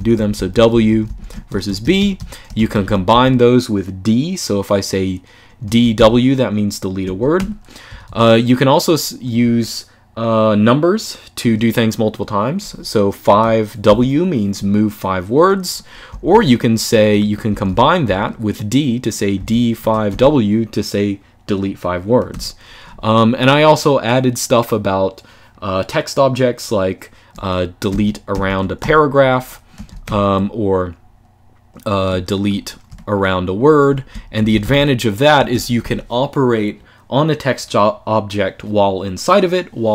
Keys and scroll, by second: 0.0-2.9 typing, 5.1-8.3 typing, 6.9 Escape, 13.0 5, 13.6 w, 15.8-20.3 typing, 22.0 u, 27.4-29.8 typing, 29.6 Escape, 31.8-32.7 typing, 33.8 Escape, 33.9-35.3 typing, 35.2 Escape.